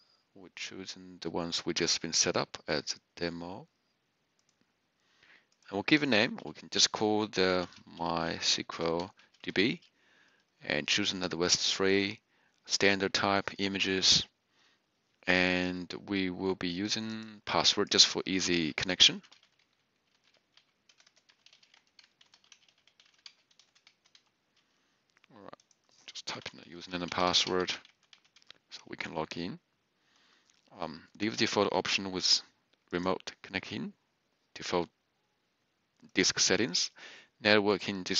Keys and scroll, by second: 7.4-9.8 typing, 18.7-24.1 typing, 26.2-28.3 typing.